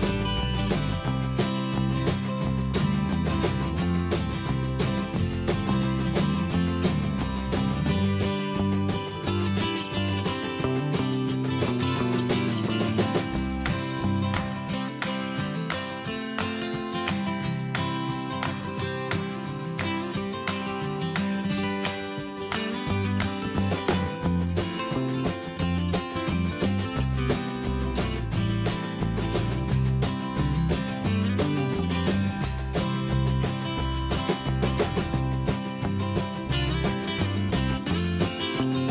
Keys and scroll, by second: 3.3 alt+Tab, 4.9 ctrl+c, 6.7 ctrl+v, 12.2 Escape, 23.9 Tab, 26.0 Return, 35.3 ctrl+h.